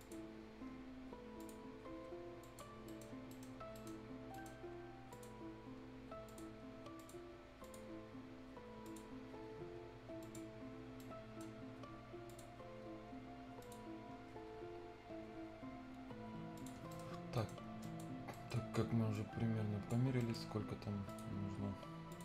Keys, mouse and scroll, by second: 0.0 click, 0.2 scroll down 1, 0.4 scroll up 1, 1.3 click, 2.7-3.3 scroll down 2, 2.8 right click, 3.3 right click, 3.5 scroll up 1, 3.7 right click, 3.9 scroll down 1, 4.0 scroll up 1, 4.3 right click, 5.1 click, 5.3-5.6 scroll down 1, 6.2 click, 9.1 scroll down 1, 10.2 click, 10.4 scroll down 1, 10.7 scroll up 1, 10.9-12.3 right drag, 12.2 click, 12.3 click, 12.5 scroll down 1, 13.6 click, 13.6 scroll up 1, 13.6 click, 14.4 scroll down 1, 15.2-15.5 scroll up 1, 16.5 click, 16.7 scroll down 1, 16.9 right click, 17.2-17.7 scroll up 2, 17.3 right click, 17.8 click, 18.3 right click, 19.1 click, 20.2 right click, 21.0 click, 21.4 scroll up 1, 22.1 click.